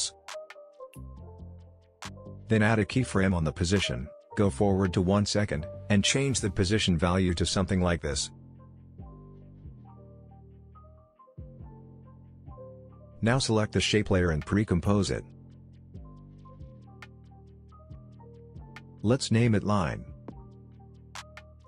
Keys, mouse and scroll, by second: 8.6 space, 10.6-12.2 drag, 15.3 right click, 16.0 click, 18.7-19.9 typing, 20.1 Return.